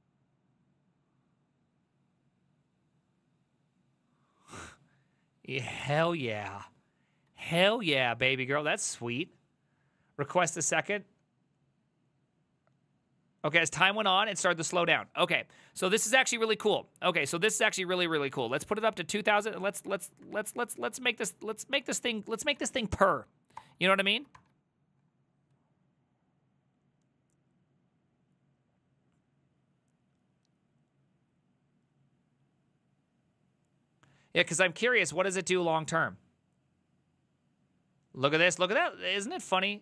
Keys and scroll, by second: 7.4 alt+{, 8.3 alt+[, 14.9 alt+{, 15.5 Up, 16.0 ctrl+Left, 16.7 ctrl+Left, 16.7-17.2 ctrl+Left, 17.5 ctrl+Right, 18.2 BackSpace, 18.9 ctrl+Left, 19.1 ctrl+Left, 19.2 ctrl+Left, 19.6 Right, 19.7 BackSpace, 19.9 BackSpace, 20.3 ctrl+Right, 20.5 ctrl+Right, 20.6 ctrl+Right, 20.9 Left, 21.4 Right, 21.6 BackSpace, 21.8 Right, 22.4 Left, 22.6 4, 23.6 Return, 24.0 alt+[, 24.4 ctrl+r.